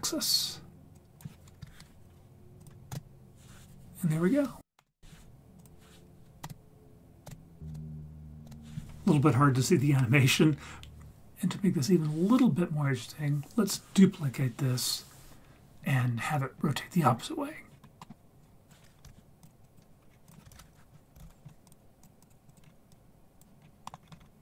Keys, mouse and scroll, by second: 1.0 click, 2.6 click, 2.9 space, 4.8 space, 5.7 click, 6.4 space, 7.2 space, 7.7 space, 8.5 space, 17.7-18.1 scroll down 5, 18.0 middle click, 18.4 click, 19.4 shift+d, 19.6 click, 20.1 scroll up 2, 20.2 click, 20.5 shift+a, 22.2 click, 22.5 click, 22.6 scroll up 2, 22.9-23.4 drag, 23.6 scroll down 3, 23.8 middle click, 24.0-24.4 scroll up 1.